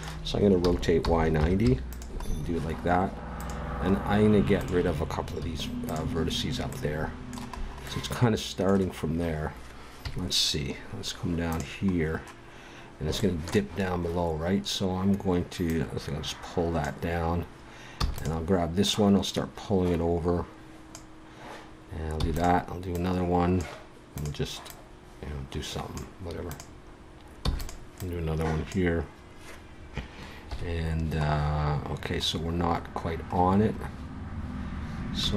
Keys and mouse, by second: 0.6 r, 1.6 click, 3.4 right click, 5.4 x, 10.0 KP_3, 11.5 right click, 11.9-13.3 drag, 13.3 middle click, 13.5-15.6 middle drag, 15.6 click, 15.7-17.5 right drag, 17.9 e, 18.8 click, 22.1 e, 22.9-26.4 drag, 26.5-29.8 drag, 27.4 e, 30.4 KP_1, 31.2-33.7 middle drag.